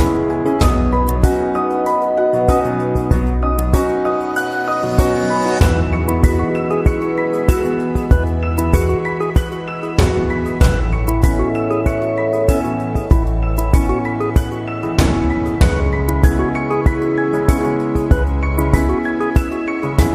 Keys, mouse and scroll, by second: 1.0 click, 1.1 click, 5.3 shift+click, 5.3 typing, 6.9 right click, 8.7 click, 9.1 click, 10.3 click, 10.3 typing, 11.6 click, 12.3 click, 13.0 space, 13.3 click, 13.6 space, 17.3 typing, 18.9 click.